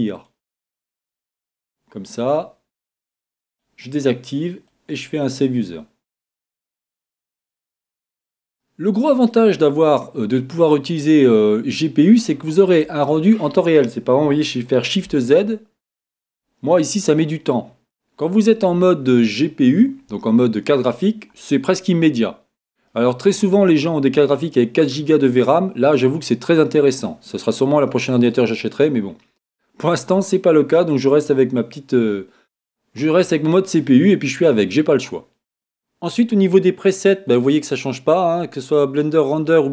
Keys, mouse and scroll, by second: 0.1-2.0 drag, 7.9-9.6 middle drag, 9.8 middle click, 15.4 shift+z, 22.9-24.8 middle drag, 33.8-35.5 middle drag, 37.3-39.2 drag.